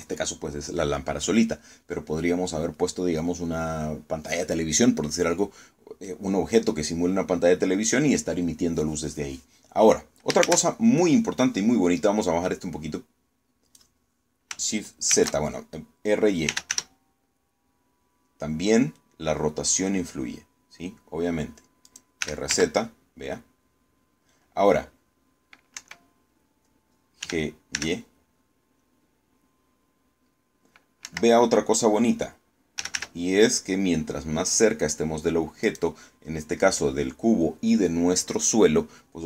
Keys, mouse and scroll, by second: 11.1 shift+z, 12.9-14.6 drag, 15.8 shift+z, 16.9-17.8 typing, 22.5 click, 22.7-23.6 typing, 26.4 Escape, 27.9 g, 28.4 y, 31.7 Escape, 33.2-34.1 typing, 36.3 click.